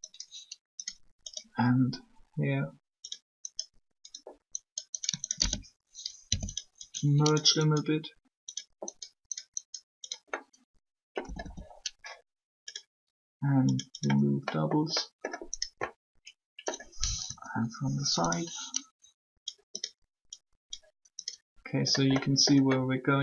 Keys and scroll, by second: 6.1 shift+0, 11.1 a, 17.2 3.